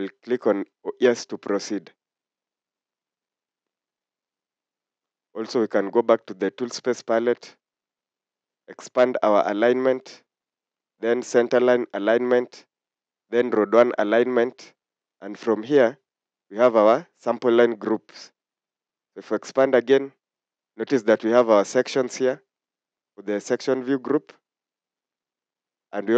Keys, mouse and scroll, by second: 3.2-3.6 scroll down 1.